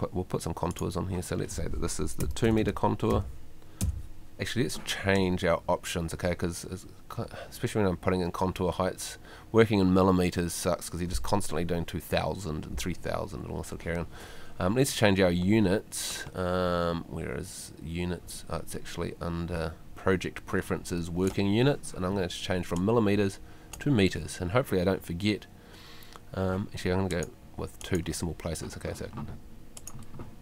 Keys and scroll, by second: 2.0-2.9 typing.